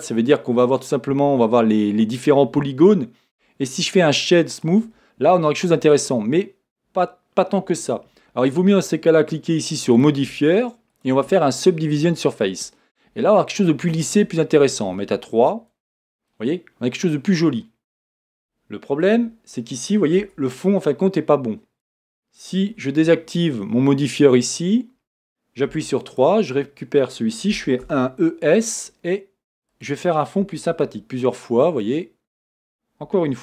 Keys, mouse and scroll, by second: 12.6-16.3 drag, 16.3-19.4 middle drag, 19.4 click, 20.4 Tab, 24.1-25.7 drag, 25.8 3, 26.3 click, 29.7 e, 29.8 click, 30.4 e, 32.4 click, 33.1 e.